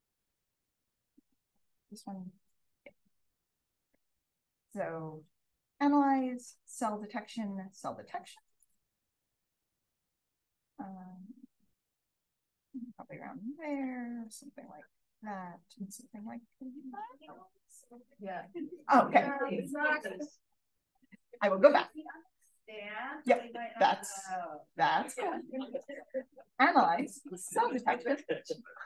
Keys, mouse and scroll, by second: 0.0-1.6 scroll up 2, 1.6-2.0 scroll up 1, 2.0 click, 2.9-6.8 scroll up 2, 6.8-9.1 scroll up 1, 11.7 click, 12.6 1, 13.5 click, 14.1 drag, 15.0 4, 15.8 click, 17.4 click, 18.3 2, 18.6 2.